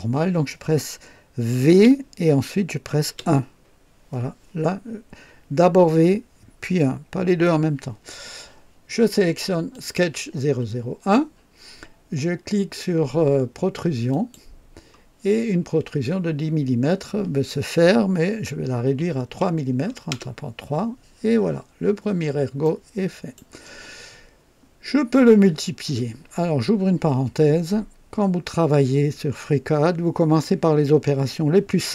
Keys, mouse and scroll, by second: 1.6 v, 1.8 v, 3.1 KP_1, 9.7 click, 14.1 click, 19.0 KP_3, 20.1 KP_Enter, 20.1 KP_Enter, 21.7-22.0 scroll down 1, 22.6-23.5 right drag.